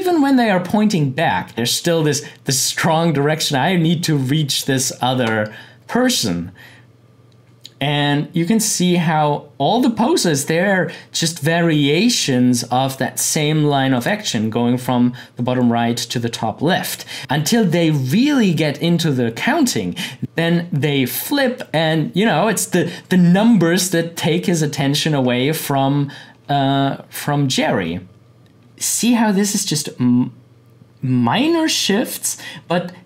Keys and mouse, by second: 6.1-12.2 drag, 13.9 click, 16.9 click, 20.2 click, 28.7-33.0 drag.